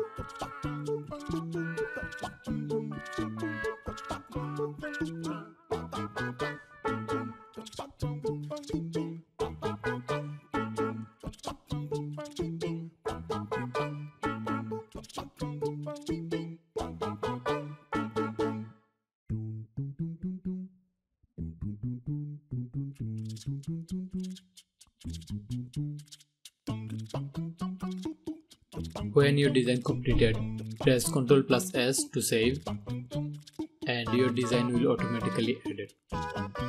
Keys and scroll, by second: 28.5 ctrl+s.